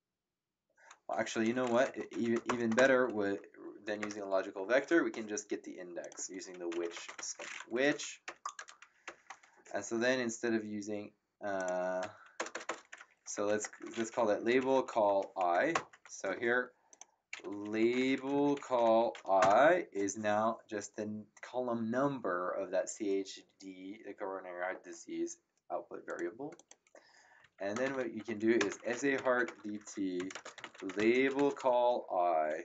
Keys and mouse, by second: 2.1 End, 2.4 shift+Home, 2.7 BackSpace, 6.0 click, 6.3-9.0 typing, 7.7 End, 11.5 click, 12.3 BackSpace, 13.5 ctrl+Right, 14.1-15.6 typing, 15.7 Return, 16.9 click, 17.5-19.6 typing, 26.0 click, 27.6-32.4 typing.